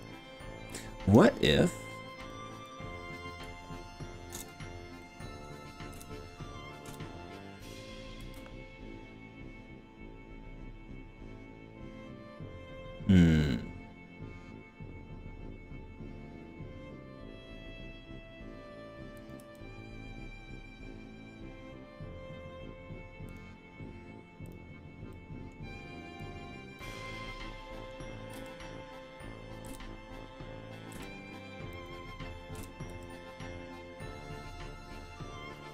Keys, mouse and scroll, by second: 0.1-1.2 drag, 1.9 click, 2.2 click, 2.7 click, 4.5 ctrl+KP_Add, 5.0 middle click, 5.3 click, 5.9 KP_1, 6.9 KP_3, 8.2 r, 13.3-14.1 scroll up 6, 14.5 scroll up 1, 15.1-15.7 scroll up 3, 17.1 scroll up 1, 18.1 scroll down 1, 19.2 click, 19.5 g, 23.3 click, 24.5 click, 25.1 middle click, 26.3 click, 27.1 middle click, 27.9 click, 28.4 g, 29.7 KP_3, 31.0 KP_3, 31.7 scroll up 1, 31.9 click, 32.6 KP_3, 32.9 g.